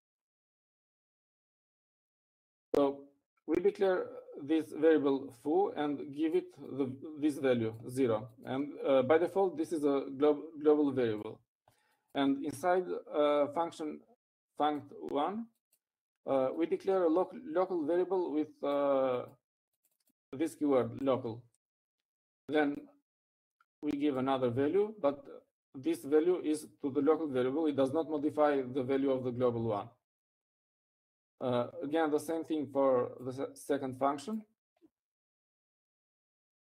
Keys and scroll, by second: 0.0-0.4 typing.